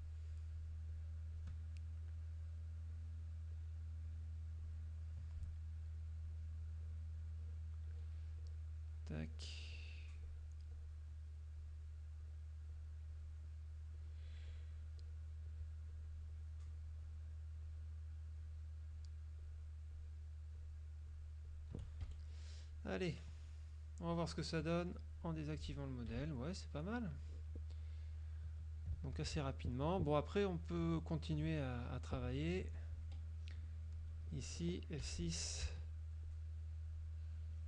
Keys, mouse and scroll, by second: 0.4 shift+click, 2.3 shift+click, 3.0 shift+click, 3.6 shift+click, 6.0 shift+click, 7.5 shift+click, 8.0 shift+click, 9.3 shift+click, 9.9 shift+click, 11.7 shift+click, 12.3 shift+click, 12.8 shift+click, 14.0-15.0 shift+drag, 17.8 shift+click, 18.5 shift+click, 19.0 shift+click, 19.5 shift+click, 20.7 shift+click, 21.2 shift+click, 22.2 shift+F1, 22.4 shift+click, 23.2 click, 25.1 click, 26.0 click, 26.2 KP_Subtract, 27.4 click, 28.1 click, 29.2 ctrl+click, 29.3 ctrl+s, 29.5 ctrl+click, 31.0 z, 31.5 click, 32.2 click, 32.8 F3, 33.2 F2, 33.2 click, 34.1 click, 35.2 F6, 36.4 shift+click, 37.5 shift+click.